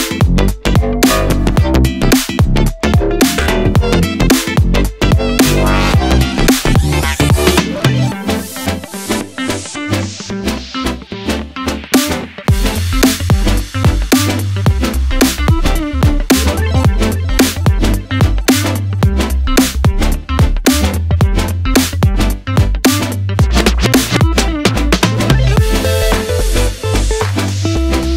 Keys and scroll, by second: 6.6 BackSpace, 23.1 d.